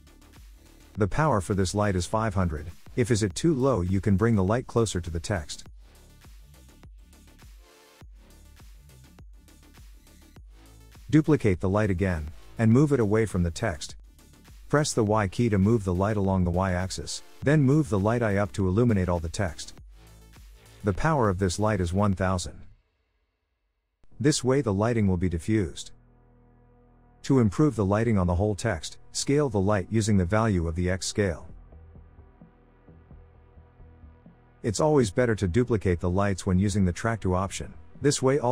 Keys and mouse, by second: 3.8-4.8 drag, 6.1-7.5 drag, 10.3-12.1 drag, 12.7 shift+d, 15.3 y, 16.9 click, 17.9-19.6 drag, 20.5-23.2 drag, 24.7-26.1 drag, 27.1 click, 29.2-31.0 drag, 32.3-33.3 drag, 34.2 click, 35.7 click, 37.0 s, 37.7 click.